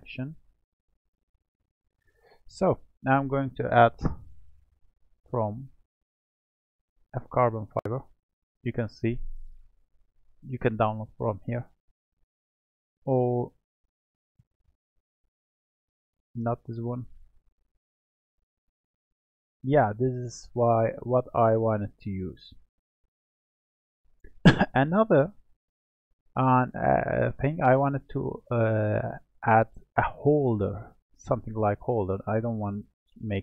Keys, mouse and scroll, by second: 4.1 click, 5.4-8.5 drag, 9.0-12.0 middle drag, 13.6-16.6 drag, 16.8-19.8 drag, 20.0 scroll down 1, 20.2-22.3 middle drag, 22.3-23.9 scroll up 1, 23.9 click, 24.9-26.8 middle drag, 26.8-29.9 scroll down 1, 31.6-32.5 scroll up 2, 32.5-33.4 middle drag.